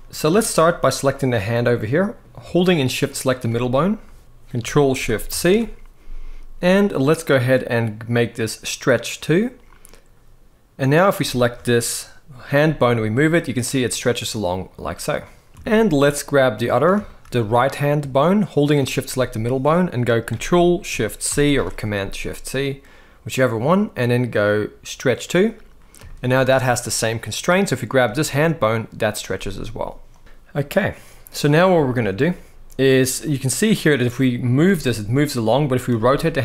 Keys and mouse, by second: 0.1 shift+middle drag, 1.2 middle click, 2.7 shift+click, 5.0 ctrl+shift+c, 11.1 shift+middle drag, 12.4 g, 15.5 shift+middle click, 16.8 shift+middle drag, 18.5 shift+click, 21.0 ctrl+shift+c, 25.8-26.1 shift+middle drag, 27.8 g, 29.8 click, 30.1 g, 30.4 middle click, 31.6-31.9 shift+middle drag, 32.9 click, 34.4 g, 35.6 r.